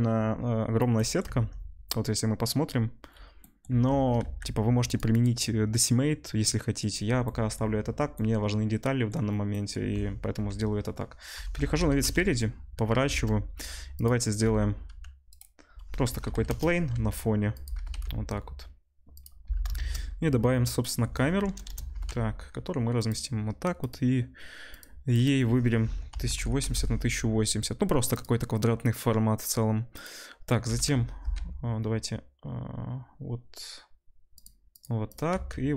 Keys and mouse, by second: 2.4 Tab, 4.0 Tab, 4.3 ctrl+s, 4.9 click, 10.3 KP_1, 11.3 r, 13.0 shift+a, 14.3-17.6 drag, 14.3-15.4 middle drag, 14.3-15.4 right drag, 14.3 g, 15.8 r, 16.9 s, 17.6-23.7 middle drag, 17.7 g, 19.7 shift+a, 21.6 KP_0, 21.9 g, 23.7 click, 23.9 middle click, 24.7 click, 24.8 middle click, 25.1-28.2 drag, 28.2 middle click, 28.9-30.0 drag, 30.0-35.7 middle drag, 30.6 g, 35.3 s.